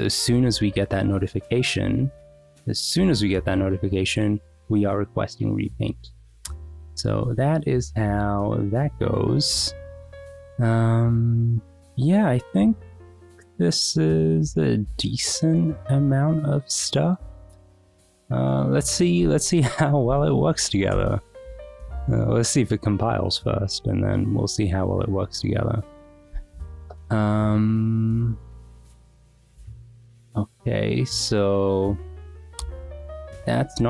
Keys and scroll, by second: 19.4 ctrl+c, 20.0 Up, 20.9 Return.